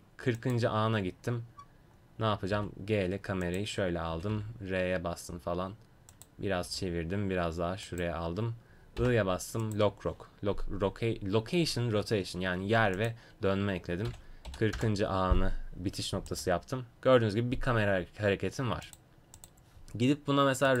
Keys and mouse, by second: 0.4-2.5 drag, 2.5 g, 4.1 r, 6.6 g, 9.0 i, 12.9-18.2 drag, 18.8-20.8 drag.